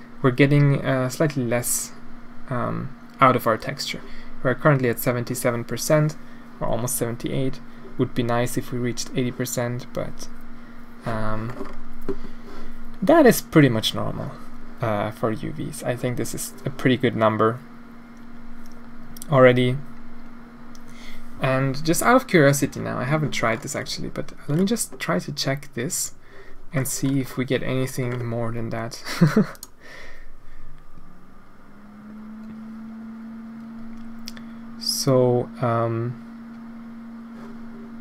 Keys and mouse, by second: 22.7-23.3 middle drag, 25.9 click, 29.5-38.0 drag.